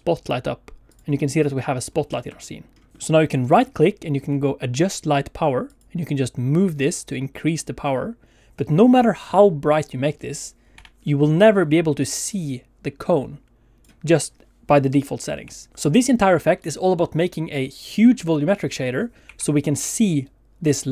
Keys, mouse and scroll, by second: 0.9 click, 1.1 middle click, 1.9 scroll up 2, 2.1 shift+middle click, 2.3-2.9 scroll down 2, 3.4 ctrl+z, 3.4 middle click, 3.4 right click, 10.7 Escape, 11.0 middle click, 11.6 d, 12.0 click, 12.1-13.9 d, 15.4 d, 15.6 right click, 15.7 Escape, 15.7 r, 19.2 r.